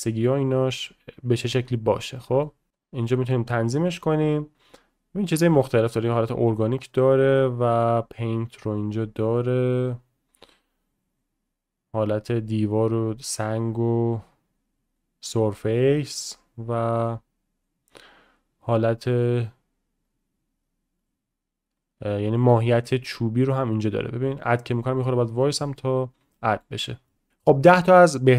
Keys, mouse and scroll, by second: 0.4-1.5 drag, 2.1 middle click, 2.7 click, 3.0 click, 4.0-5.8 drag, 5.9-6.7 drag, 7.0 click, 8.0-8.4 drag, 8.8-9.4 drag, 9.9-11.0 drag, 11.2-12.3 drag, 12.5-13.5 drag, 13.6 click, 15.0 click, 16.5-17.7 drag, 17.9-19.2 drag, 22.9-23.6 middle drag, 26.4 middle click, 26.8 click, 27.1 middle click.